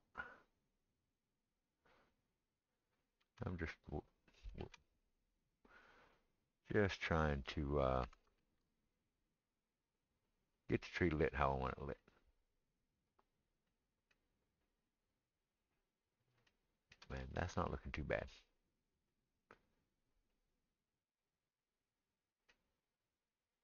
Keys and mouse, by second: 1.6-5.3 middle drag, 3.3 shift+z, 5.0 shift+z, 5.3-12.6 drag, 8.1 s, 12.6-23.6 middle drag.